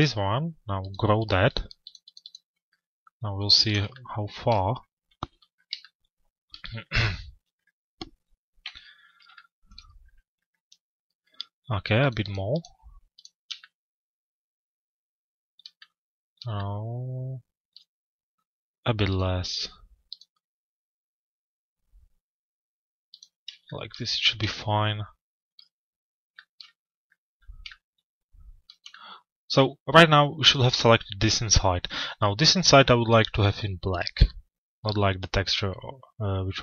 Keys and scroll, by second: 8.2 z.